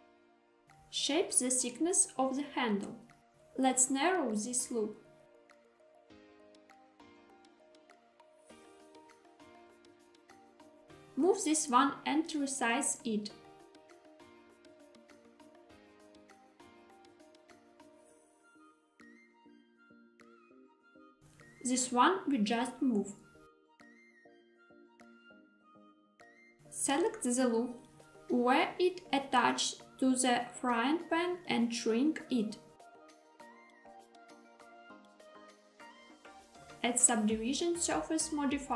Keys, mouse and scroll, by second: 0.9 click, 3.4 click, 3.7 click, 4.1 g, 4.6 x, 6.0 click, 6.4 s, 7.2 y, 10.2 click, 11.5 click, 12.5 g, 12.6 x, 16.1 click, 17.3 s, 17.6 y, 20.7 click, 21.2 click, 21.4 click, 22.4 g, 22.9 x, 25.5 click, 26.9 alt+z, 29.1 click, 29.3 click, 29.7 s, 30.4 y, 33.3 click, 35.0 alt+z, 37.5 click.